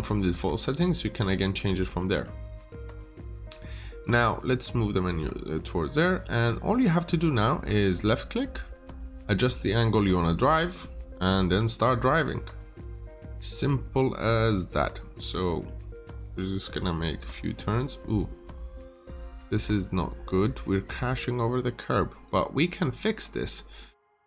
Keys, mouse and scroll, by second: 0.5 click, 1.9 middle click, 3.9 click, 5.6 scroll up 1, 7.9 click, 11.2 middle click, 11.6 scroll up 1, 13.0 click, 15.6 middle click, 22.2 click, 22.7 middle click, 24.0 click.